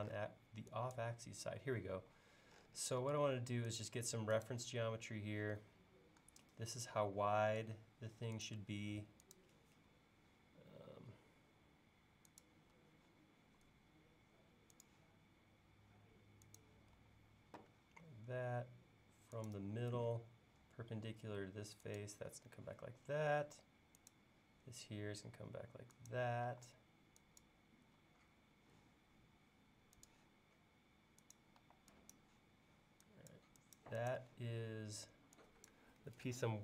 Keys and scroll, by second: 2.0 l, 12.7 l, 17.0 l, 22.3 l, 26.5 e, 28.0 l, 31.6 e.